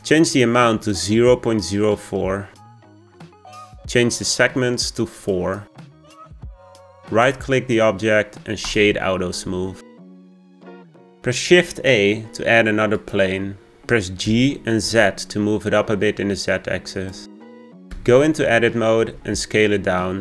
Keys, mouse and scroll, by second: 0.8-3.9 drag, 5.1-7.2 drag, 7.2-10.2 right drag, 11.4 shift+a, 14.2 g, 17.9 Tab, 19.0 s.